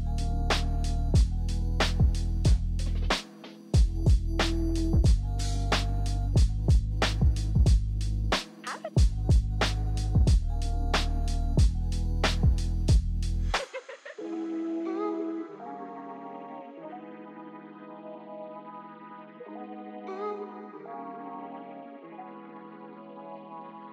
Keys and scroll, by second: 0.1 ctrl+z, 0.9 ctrl+z, 4.6 ctrl+d, 4.8 ctrl+d, 5.1 ctrl+d, 5.3 ctrl+d, 5.7-7.1 typing, 9.9 typing, 11.7 shift+e, 14.5-19.7 typing, 23.2 e, 23.5 ctrl+z, 23.7 ctrl+z, 23.8 3.